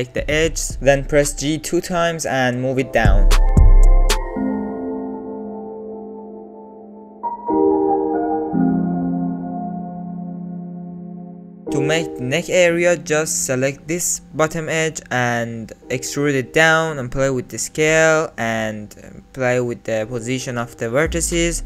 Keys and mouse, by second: 0.2 middle click, 0.4 middle click, 0.7 alt+z, 1.6 g, 4.0 alt+z, 4.4 click, 5.0 ctrl+z, 5.3 g, 5.8 alt+z, 5.9 click, 6.0 Tab, 6.1 click, 6.5 Tab, 6.6 click, 6.7 alt+z, 6.8 click, 7.4 click, 7.6 1, 8.0 g, 8.5 click, 8.8 click, 9.0 g, 9.3 click, 9.6 click, 9.8 click, 9.9 g, 10.3 click, 10.5 alt+z, 10.6 click, 10.7 Tab, 10.8 click, 10.9 middle click, 11.4 middle click, 11.9 Tab, 12.4 shift+middle click, 12.7 alt+z, 13.0 middle click, 14.3 alt+shift+click, 14.9 alt+click, 15.2 alt+click, 16.5 e, 18.7 s, 21.5 alt+click.